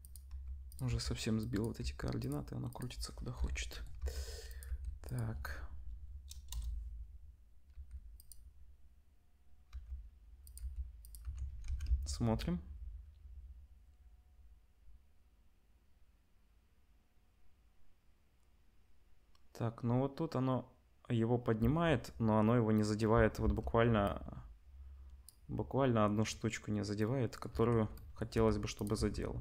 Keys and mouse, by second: 0.2 r, 0.8 g, 1.8 g, 3.3 l, 3.9-6.4 drag, 3.9 r, 4.6 g, 6.4-24.0 middle drag, 6.5 KP_0, 9.7 r, 10.5 g, 11.2 Tab, 11.6 ctrl+s, 11.9 space, 21.6 space, 23.1 space, 24.0-28.8 drag, 27.5 Tab, 28.3-29.4 typing, 28.8-29.4 middle drag.